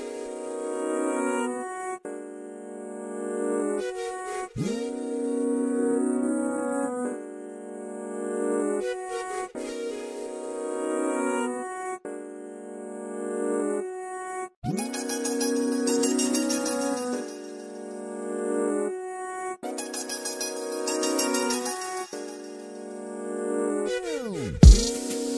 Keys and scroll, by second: 3.0-4.7 typing, 5.7-6.8 typing, 8.0 r, 9.9 BackSpace, 12.9-14.0 typing, 16.8-17.6 typing, 23.1-24.0 typing, 25.1 typing.